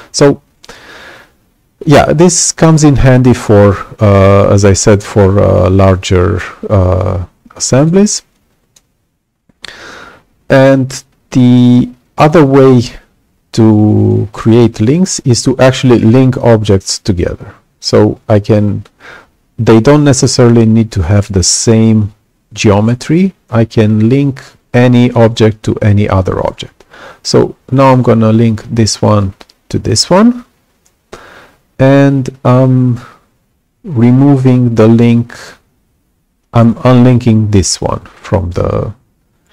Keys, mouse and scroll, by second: 6.1-7.8 right drag, 6.7-7.8 drag, 8.2 right click, 8.3 click, 16.0 click, 28.7-29.9 drag.